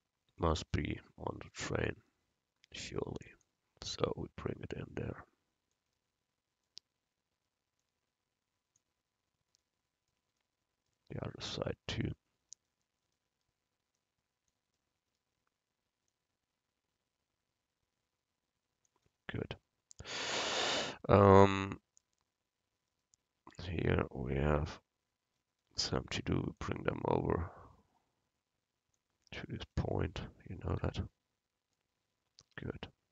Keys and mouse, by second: 0.5-2.1 drag, 2.1 middle click, 3.5-5.3 drag, 12.6-14.6 right drag, 14.0-18.0 drag, 23.0-24.7 right drag, 24.7 KP_7, 29.8 KP_Decimal, 32.5 a.